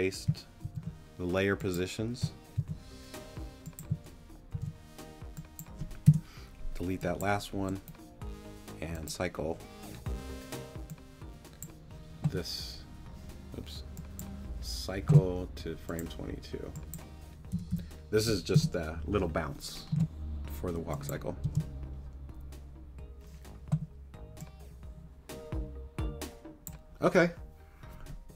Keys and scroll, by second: 0.6 super+c, 2.6 super+v, 4.5 super+v, 6.1 BackSpace, 17.5 2, 18.5 Return, 21.4 space.